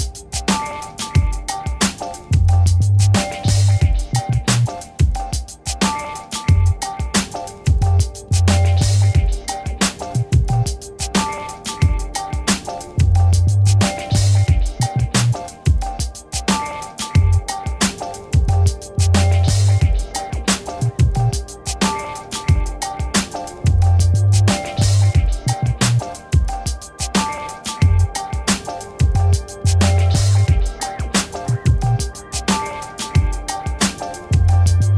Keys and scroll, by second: 3.3-5.0 typing.